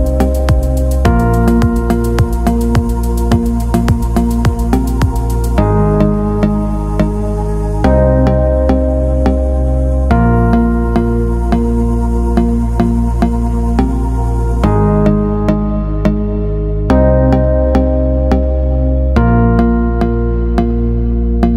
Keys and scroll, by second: 0.6 ctrl+], 1.6 ctrl+0.